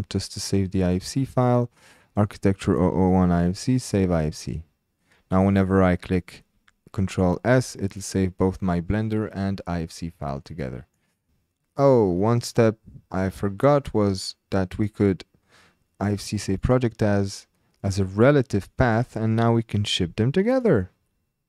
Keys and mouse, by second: 10.4 ctrl+click, 10.4 typing, 14.8-16.9 drag.